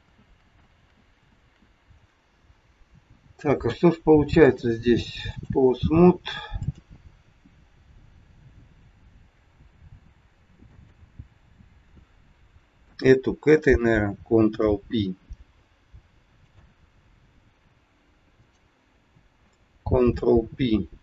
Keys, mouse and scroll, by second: 0.1 ctrl+z, 0.5 ctrl+z, 1.2 ctrl+z, 4.5 click, 6.5 click, 8.1 g, 12.9 shift+click, 14.4 ctrl+p, 16.5 click, 19.9 ctrl+p.